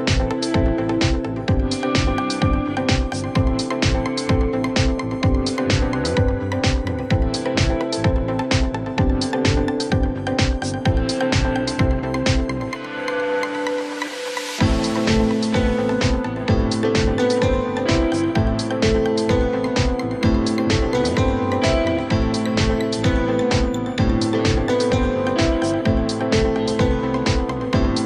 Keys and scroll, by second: 4.9 space, 7.1 ctrl+g, 9.3 ctrl+z, 15.5 ctrl+g, 16.0 shift+c, 16.6 F3, 17.0 Escape, 17.6 F4, 18.1 F3, 18.3 Escape, 19.6 F2, 23.4 Caps_Lock, 24.5 u, 24.7 p, 25.1 t, 25.4 o, 25.7 Return, 26.4 5, 26.6 0.